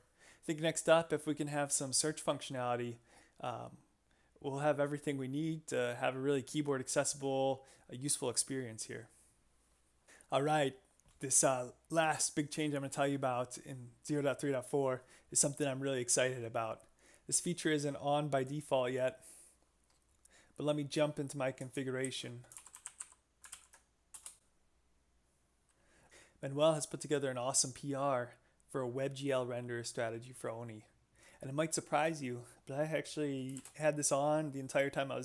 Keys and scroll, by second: 22.1 shift+super+p, 22.3-23.5 typing, 23.5 ctrl+n, 24.1 Return, 33.6 shift+v.